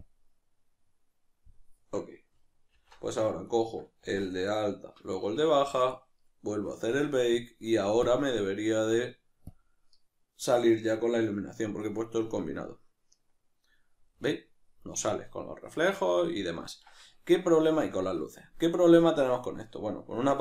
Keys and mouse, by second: 2.7 alt+h, 2.7 click, 3.5 right click, 4.0 z, 4.5 right click, 5.1 shift+right click, 7.3-14.1 drag, 14.1-20.4 middle drag.